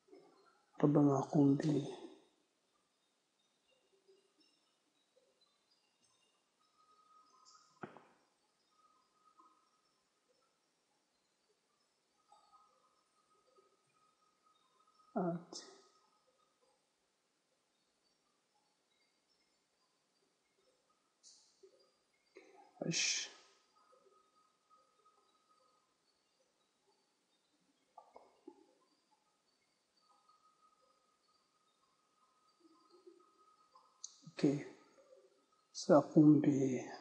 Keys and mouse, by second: 2.2 z, 5.1 middle click, 5.6 z, 8.6 b, 14.4 h, 18.0 ctrl+z, 20.4-22.8 right drag, 22.8 h, 24.6 z, 25.9-27.8 right drag, 27.8 z, 29.2 b, 36.3 z.